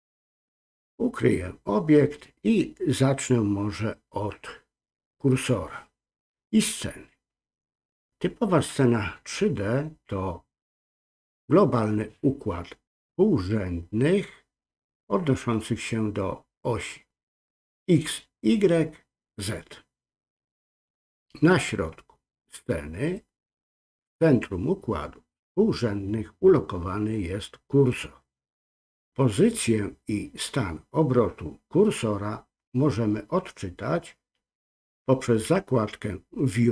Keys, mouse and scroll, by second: 1.5 click.